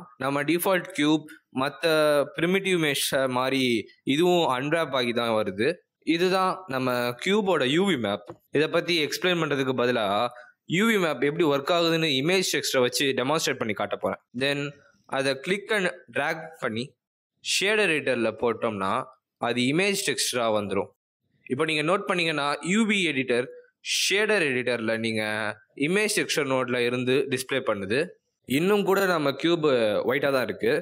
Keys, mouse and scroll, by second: 2.9 a, 13.3 click, 14.7 click, 15.8 click, 18.9 middle click, 19.8-20.3 scroll down 4, 20.5-21.8 scroll down 6, 21.8 scroll down 2, 21.8 click, 23.1 middle click, 30.4 click.